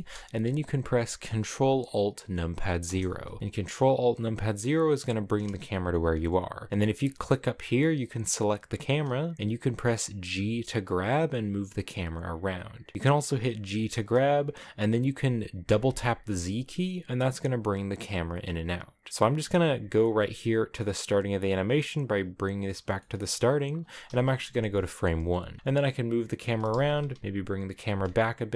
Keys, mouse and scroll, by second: 2.7 ctrl+alt+KP_0, 6.7 a, 7.0 right click, 10.3 g, 13.6 g, 19.8-23.0 drag, 23.0 shift+middle click, 23.1 scroll down 4, 24.4 Right, 25.4 scroll up 1, 25.6 g, 26.4 g, 27.7 r.